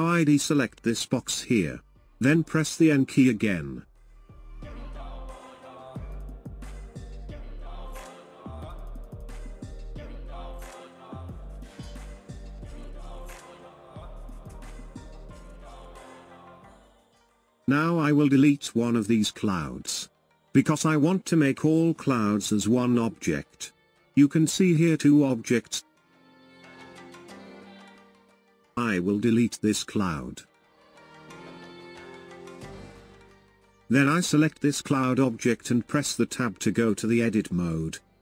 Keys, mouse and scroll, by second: 0.5 click, 2.9 n, 4.0-4.6 scroll up 1, 5.4-8.0 drag, 9.5 KP_0, 12.5-14.8 middle drag, 14.8 KP_0, 17.1 click, 20.3-31.7 drag, 31.7 Delete, 33.6-36.2 drag, 36.2 Tab.